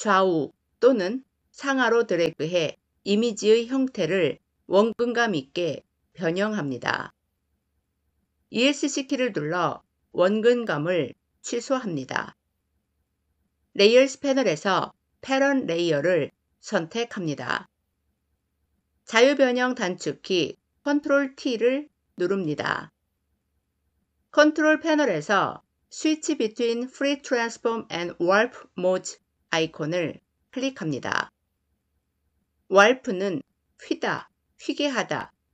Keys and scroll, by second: 8.6 Escape, 20.4 ctrl+t.